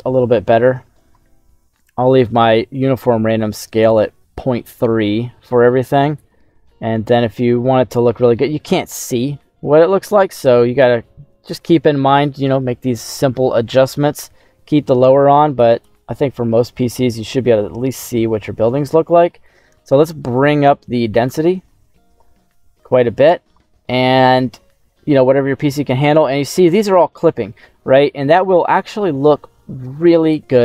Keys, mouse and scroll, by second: 2.7 middle click, 4.3 middle click, 5.1 middle click, 5.9 middle click, 6.6 middle click, 9.1 middle click, 10.1 middle click, 10.7-15.4 drag, 16.1 middle click, 16.7 scroll up 1, 16.9-19.2 middle drag, 20.3-23.2 drag, 24.0 scroll down 2, 24.2 middle click, 25.0-25.5 scroll up 2, 25.5 middle click, 27.8 shift+middle click, 28.5 scroll up 2.